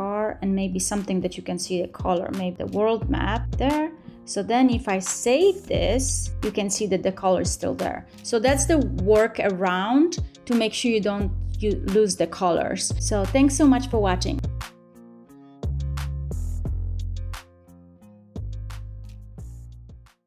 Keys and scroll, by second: 5.5 super+s.